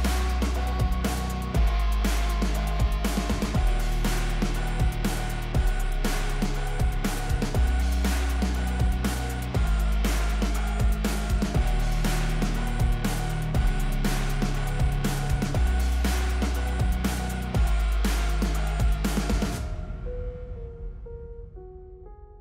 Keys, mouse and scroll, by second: 0.4-1.1 drag, 11.7 drag, 13.5-13.9 drag.